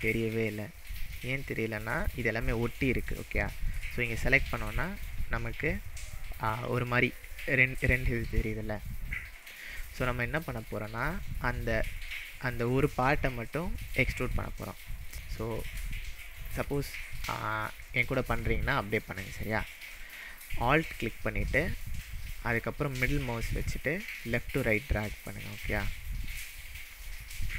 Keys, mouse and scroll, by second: 0.6-1.1 shift+middle drag, 1.4-2.8 scroll up 6, 2.9-5.1 click, 4.7-6.3 middle drag, 6.3 click, 7.2-7.7 click, 9.4 click, 10.1-10.9 middle drag, 11.3 click, 12.3 click, 13.0-13.5 middle drag, 15.1-15.7 scroll down 3, 16.1-16.6 shift+middle drag, 18.1-18.6 scroll down 2, 18.6-19.4 shift+middle drag, 24.2-26.1 alt+middle drag, 26.9-27.5 alt+scroll down 6.